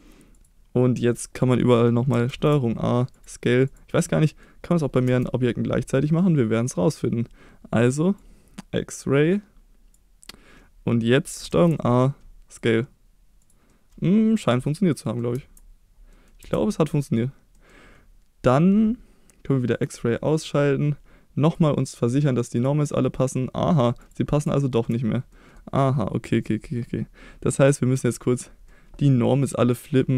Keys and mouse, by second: 2.3 ctrl+a, 3.7-4.0 drag, 4.0-4.4 middle drag, 5.1 KP_1, 8.3-10.0 drag, 10.9 middle drag, 11.5 ctrl+a, 13.7-14.4 middle drag, 14.7-15.2 middle drag, 15.4 Tab, 16.1 middle click, 16.4 Tab, 17.5 middle click, 21.5-22.8 drag, 23.0 middle drag, 24.0 click, 24.6-24.9 shift+middle drag, 25.3 middle click, 28.7-29.1 middle drag.